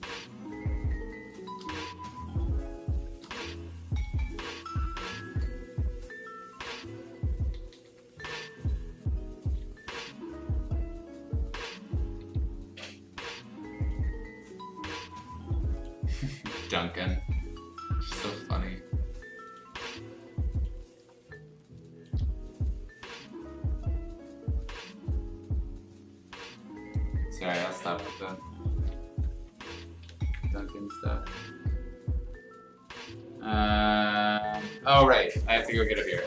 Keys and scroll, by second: 0.8 space, 2.8 space, 3.4 r, 4.0 b, 7.5 ctrl+z, 7.7 ctrl+z, 9.7 x, 12.1 Escape, 21.6 space, 27.8 ], 28.0 ], 29.3 x, 29.6 z, 30.2 b, 30.6 x, 33.1 x, 33.9 ctrl+z, 35.2 ctrl+z.